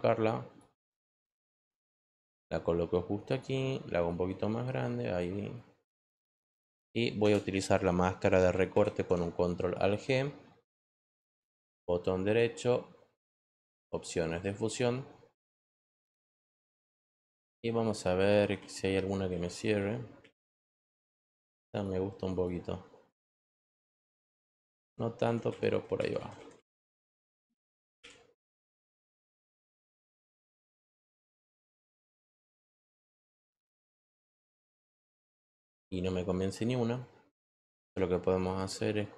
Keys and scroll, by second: 7.2 Return.